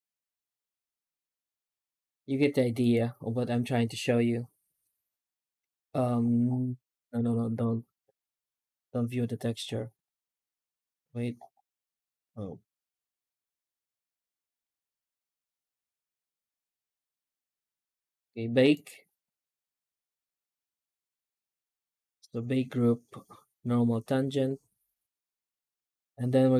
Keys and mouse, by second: 0.5 Tab, 0.8 right click, 1.2 shift+right click, 4.8 click, 14.5 z, 17.1 ctrl+s.